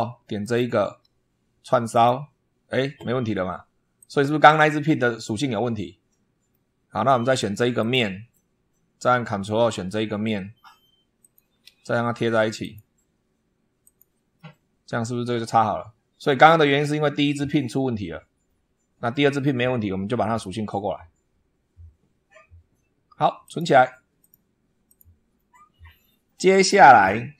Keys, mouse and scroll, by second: 0.3 ctrl+click, 1.7 click, 3.8 click, 6.3-7.1 middle drag, 7.6 click, 8.2 middle click, 11.0 ctrl+click, 12.5 click, 13.7 click, 14.2-16.3 middle drag, 23.3 click, 24.1 click, 24.7 click, 25.8 scroll up 1.